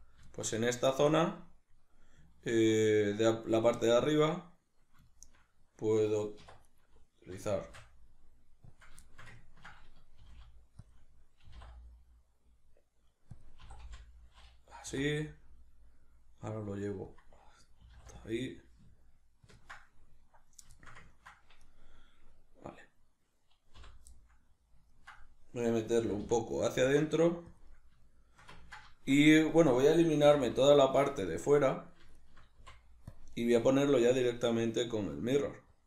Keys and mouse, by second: 2.5 Tab, 6.4 1, 6.6 right click, 7.6 shift+d, 8.8 click, 9.0-10.9 shift+middle drag, 10.2 g, 10.9 click, 11.5 e, 13.5 click, 13.7 e, 17.2 click, 17.9 e, 19.5 ctrl+click, 20.7 shift+middle click, 21.7 right click, 23.8 l, 24.1-30.7 middle drag, 26.1 g, 27.6 click, 30.3 3, 30.7 alt+right click, 31.1-32.2 shift+middle drag, 32.2 shift+right click, 32.6 x, 34.0-35.8 drag.